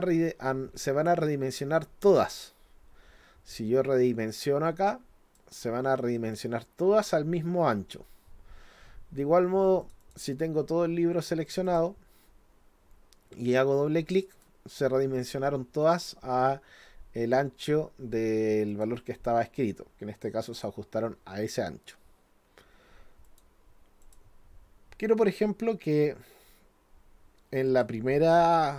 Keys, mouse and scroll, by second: 4.7 click, 9.8 click, 10.0 click, 11.5 click, 11.7 click, 14.1 click, 14.3 click, 18.7 click, 19.6-20.6 drag, 23.3 click, 24.0 click, 27.7 click.